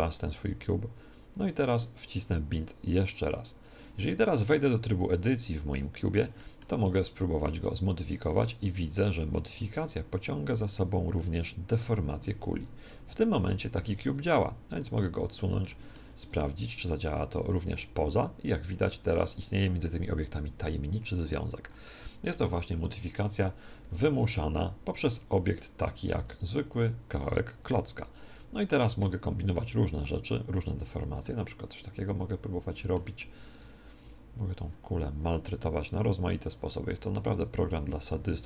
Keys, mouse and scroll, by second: 4.3 right click, 4.6 Tab, 5.7-8.0 middle drag, 6.3 Tab, 7.5 click, 14.1 Tab, 14.7 click, 15.7-17.4 middle drag, 16.3 Tab, 16.5 right click, 17.3 click, 22.3 KP_1, 23.8 g, 25.4 click, 25.8 a, 26.1 b, 28.3 r, 29.5 r, 30.9 click, 31.5-32.8 middle drag, 33.5 right click, 34.5-38.4 drag, 34.5-35.9 middle drag.